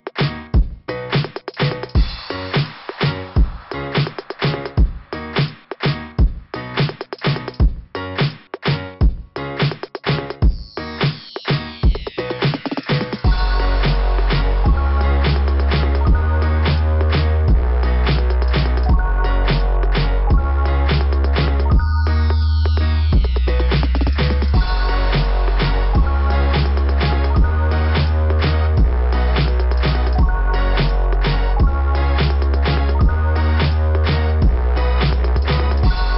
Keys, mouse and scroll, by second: 1.9 click, 5.4 click, 7.6 click, 8.0 click, 8.5 click, 8.6 click, 8.9 click, 9.3 click, 9.6 click, 12.0 scroll up 2, 18.7 click, 22.1 click, 22.5 click, 22.8 click, 23.1 click, 23.4 click, 23.7 click, 24.0 click, 24.3 click, 24.6 click, 25.9 click, 29.0 click, 30.7 scroll up 2, 30.9-31.3 scroll down 3, 31.3 scroll up 1, 34.7 click.